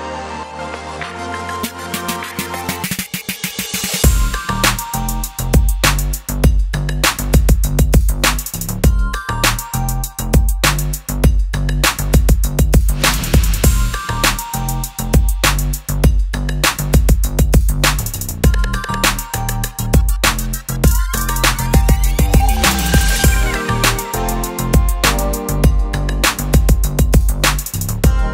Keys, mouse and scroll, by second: 2.8 click, 6.2 alt+s, 7.1 shift+s, 8.1 right click, 8.8-11.8 drag, 13.0 right click, 23.5 right click, 25.0 click, 25.4 right click, 26.5 click.